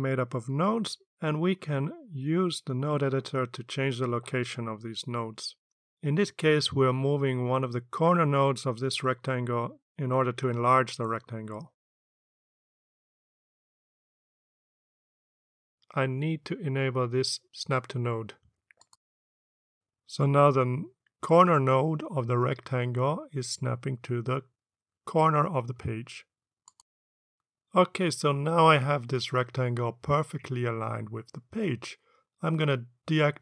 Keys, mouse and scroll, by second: 2.2-4.3 drag, 9.1 click, 13.8-19.4 drag, 19.7 click, 22.4 click, 24.9-26.7 drag.